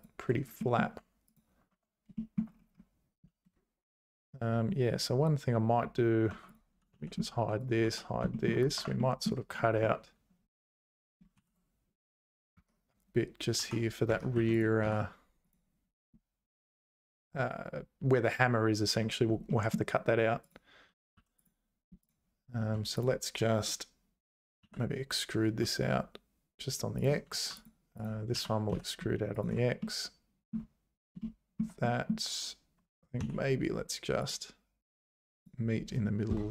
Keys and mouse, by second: 0.6 middle click, 1.0 Tab, 1.7 Tab, 2.1 shift+middle click, 6.3 Tab, 6.9 h, 7.6 click, 7.8 h, 8.3 shift+middle click, 8.8 Tab, 9.0 middle click, 11.4 ctrl+r, 13.6 k, 14.3 3, 14.8 x, 19.5 middle click, 21.1 2, 24.6 e, 27.3 2, 27.6 click, 28.3 e, 30.0 middle click, 30.5 click, 31.3 shift+click, 32.0 click, 33.2 k.